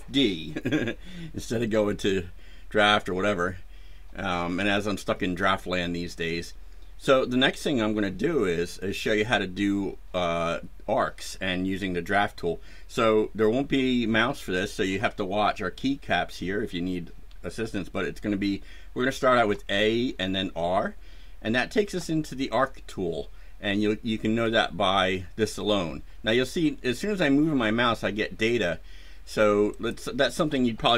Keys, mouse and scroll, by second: 19.4 a, 20.3 r, 29.7 click.